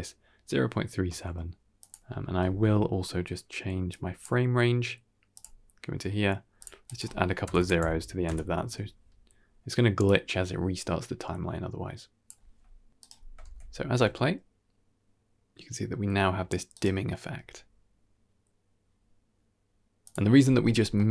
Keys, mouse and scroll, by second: 1.4 g, 2.4 shift+space, 3.8-4.2 drag, 5.2 click, 6.5-8.2 drag, 7.5 KP_0, 9.9-12.2 drag, 12.6 g, 13.0 shift+space, 13.5 g, 20.3 scroll down 2, 20.5 middle click, 21.0 click.